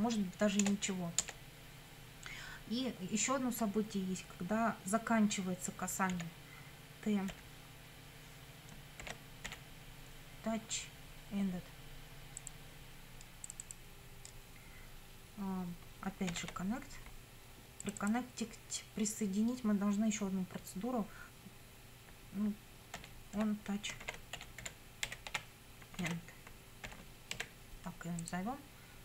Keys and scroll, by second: 0.6 Return, 6.1 t, 7.4 ., 9.0 shift+t, 9.5 o, 16.3 shift+;, 23.0-27.4 typing.